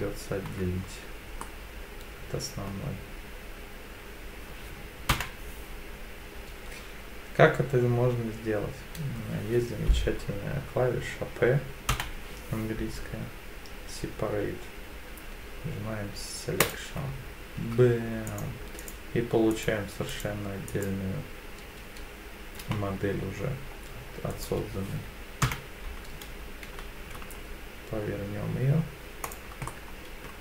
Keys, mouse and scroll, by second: 0.5 Tab, 1.4-2.7 middle drag, 5.1 p, 11.9 p, 17.6 Tab, 18.3 click, 18.8 click, 19.5 click, 20.1 click, 20.7 click, 22.6 g, 24.3 right click, 25.4 KP_7, 26.6 r, 29.2 ctrl+click, 29.7-30.3 middle drag.